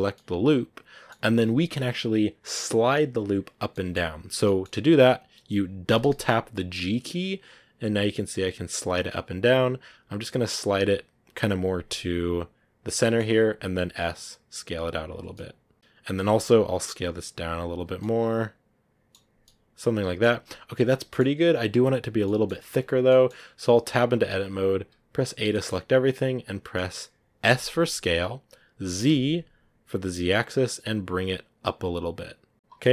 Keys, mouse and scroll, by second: 0.0-5.8 middle drag, 5.8 g, 12.8 scroll down 2, 12.9 middle click, 13.4 s, 15.2-16.2 middle drag, 16.2 alt+right click, 16.7 s, 17.8 Tab, 17.9-19.0 middle drag, 19.0 scroll down 2, 19.3-22.5 middle drag, 22.5-22.8 scroll up 2, 23.1 middle click, 23.4 Tab, 23.7 a, 23.9 a, 24.6 a, 25.1 a, 25.4-27.5 middle drag, 27.5 s, 32.7-32.9 middle drag.